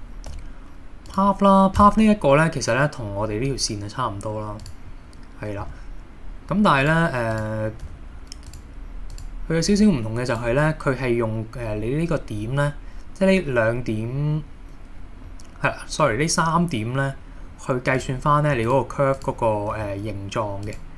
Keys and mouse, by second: 0.3 g, 1.1 click, 1.8 Tab, 5.7 g, 6.9 click, 7.8 g, 8.5 click, 9.2 click, 9.7 g, 10.3 drag, 18.6 r, 18.7 click, 19.8 g, 20.7 click.